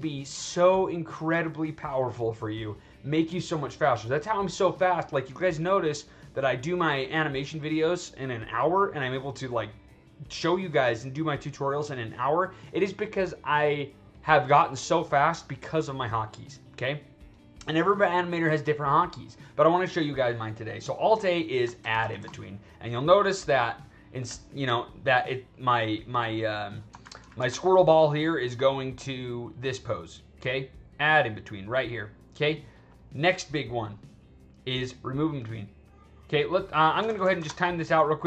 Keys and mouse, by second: 21.1 click, 21.7 alt+a, 21.9 alt+a, 22.1 alt+a, 22.3-26.7 drag, 26.9 alt+s, 27.1 alt+s, 27.3 alt+s, 27.6-32.8 drag, 34.4-35.4 drag, 35.8-36.9 drag, 37.0 alt+a, 37.1 alt+a, 37.3 alt+a, 37.5-38.2 drag.